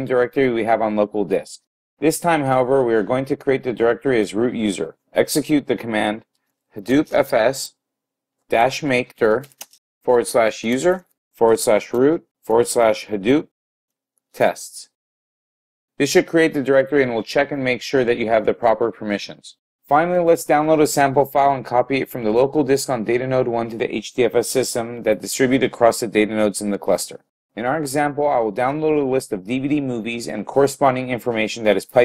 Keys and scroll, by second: 7.0-7.7 typing, 9.5-10.2 typing, 13.9 typing.